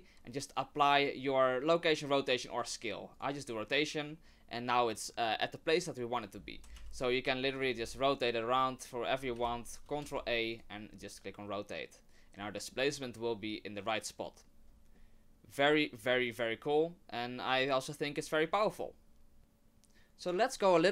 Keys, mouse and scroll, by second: 6.7 e, 7.6 right click, 7.8 r, 9.4 ctrl+r, 10.0 ctrl+a, 11.0 middle click, 14.9 middle click, 19.4 middle click.